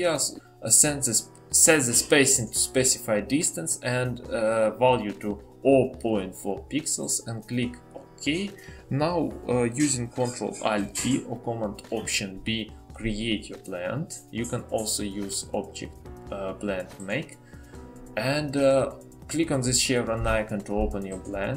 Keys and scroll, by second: 10.4 ctrl+alt+b.